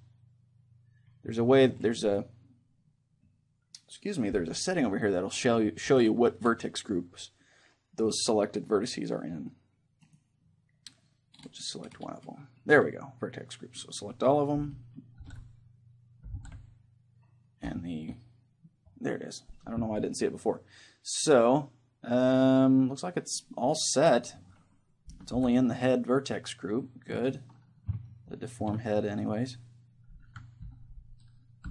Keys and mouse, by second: 10.1-11.9 right drag, 15.2 ctrl+l, 16.3 ctrl+l, 24.2-25.9 right drag, 25.3 ctrl+l, 28.1 middle click, 29.2-31.7 right drag, 30.2 Left.